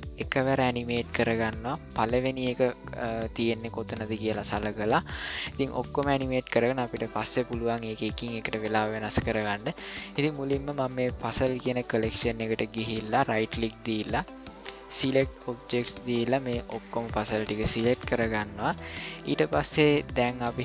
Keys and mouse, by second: 11.2 click, 13.2-15.6 right drag.